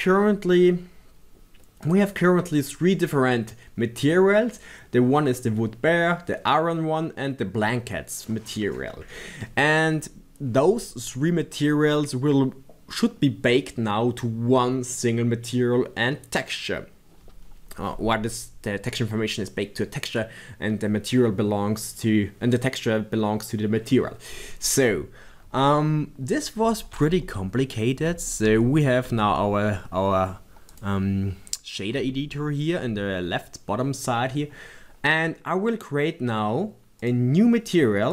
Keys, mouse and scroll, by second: 1.2-4.2 right drag.